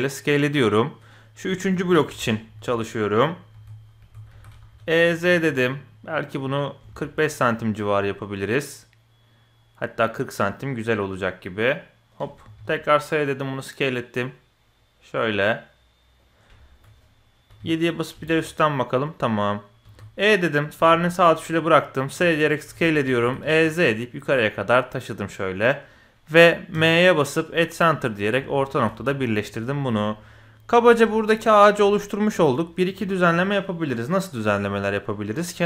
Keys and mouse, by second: 1.7 KP_1, 2.2 shift+click, 2.5 w, 3.2-3.6 drag, 4.0 w, 4.3 e, 12.4 s, 16.6 shift+click, 17.5 KP_7, 18.2 shift+click, 18.9-19.4 drag, 19.8 e, 20.8 s, 22.2-22.5 middle drag, 22.7 KP_1, 23.2 e, 26.7 m, 27.5 middle click, 28.4 KP_1, 29.0 shift+middle click, 29.4 middle click, 30.1 middle click, 30.9 shift+click, 31.2 click, 31.9 click, 32.4 click.